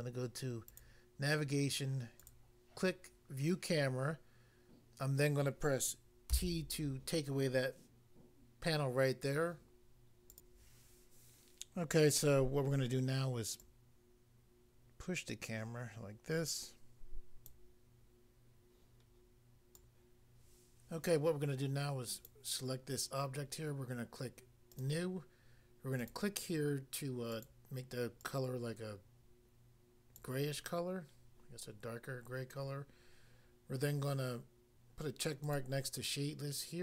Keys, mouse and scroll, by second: 0.7 click, 0.8 click, 2.2 click, 2.3 click, 6.3 t, 10.3 click, 11.5 click, 13.6 click, 17.5 click, 19.7 click, 22.2 click, 22.3 click, 23.4 click, 24.7 click, 26.0 click, 26.1 click, 27.3 click, 27.4 click, 28.2 click, 30.2 click, 35.5 click, 35.6 click.